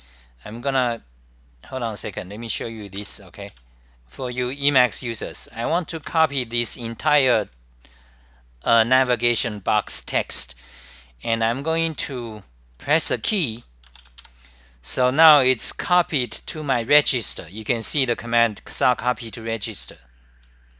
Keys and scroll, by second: 0.0-3.7 typing, 5.3-6.6 typing, 8.8-9.5 typing, 11.6-12.6 typing, 14.7-15.4 typing, 17.9-18.6 typing.